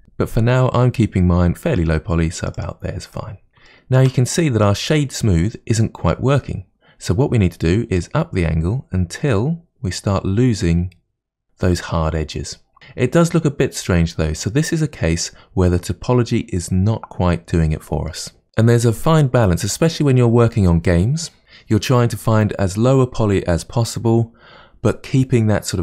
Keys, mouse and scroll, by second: 2.6 click, 3.2 middle click, 3.5 scroll down 3, 3.7-5.0 shift+middle drag, 5.0-5.8 scroll up 3, 5.8-8.0 middle drag, 8.0-11.0 drag, 13.0-14.5 scroll down 1, 14.5-17.5 middle drag, 18.1-18.4 middle drag, 19.8-21.8 scroll down 2.